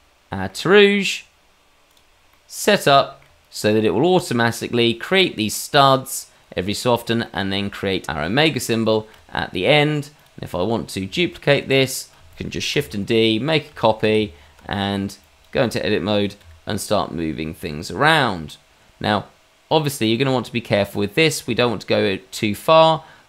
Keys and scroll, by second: 15.4 Tab, 17.1 shift+d, 18.5 Tab, 20.8 g.